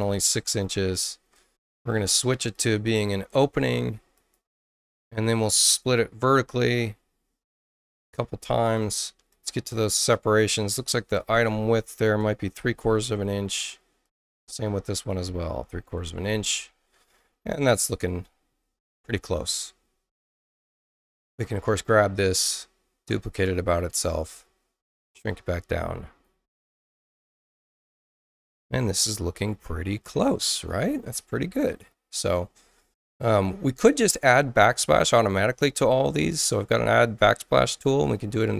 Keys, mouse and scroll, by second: 0.6 6, 1.2 Tab, 2.5 click, 4.1 click, 5.8 click, 7.5 click, 8.6 click, 9.3 click, 11.1 click, 11.7-12.7 typing, 14.0 click, 14.8 click, 15.4-16.4 typing, 18.0 click, 20.8 click, 21.2 ctrl+alt+c, 23.2 click, 25.0-26.2 drag, 36.3 click, 38.0 click.